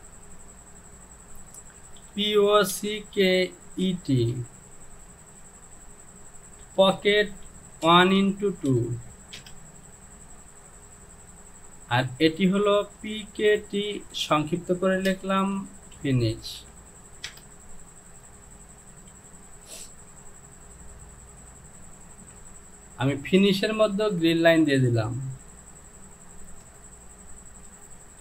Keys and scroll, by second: 2.8-4.3 typing, 6.6 space, 7.9-9.4 typing, 13.1-14.0 typing, 15.1 space, 15.6 f, 16.0 i, 16.6 n, 17.3 Return, 19.1 j, 22.3 Home.